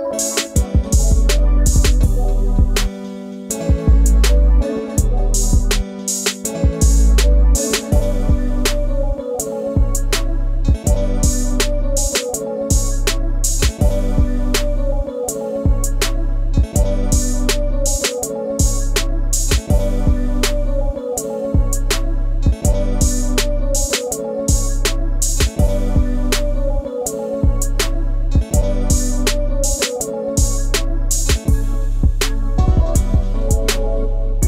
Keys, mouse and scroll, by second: 0.2-2.8 drag, 3.9 click, 4.2 click, 5.2-6.1 drag, 7.0 click, 10.5 click, 11.8-13.0 drag, 13.4 click, 16.0 Tab, 17.2-17.6 drag, 17.9-18.6 middle drag, 18.6-18.9 scroll down 1, 18.9-20.6 middle drag, 20.6-21.4 scroll up 5, 21.4-22.2 middle drag, 22.2 click, 22.5 scroll down 1, 22.6 right click, 23.4 Tab, 25.7-30.1 drag, 30.1 Tab, 30.4 click, 30.9-33.9 middle drag.